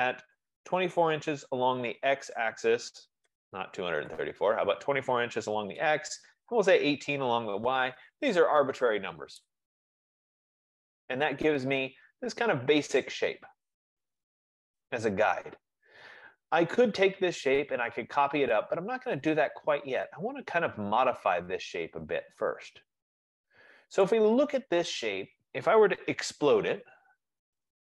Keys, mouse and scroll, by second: 0.7-1.5 typing, 3.3 BackSpace, 3.5 BackSpace, 4.5-7.2 typing, 9.5 Return, 11.6 click, 15.2-16.8 drag, 24.1-27.9 right drag, 26.7-27.9 typing.